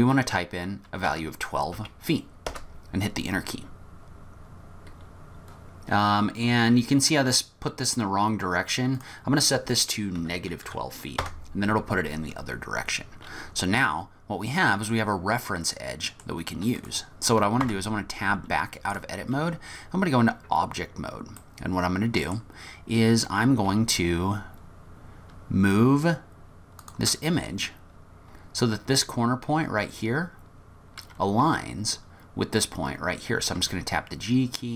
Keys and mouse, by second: 9.0-11.9 drag, 13.8 click, 14.0-15.0 middle drag, 15.8 middle click, 17.7 Tab, 21.6-22.4 middle drag, 22.0 click, 23.7 g, 25.0 middle click, 25.7-26.9 middle drag, 29.7 f, 33.6 g.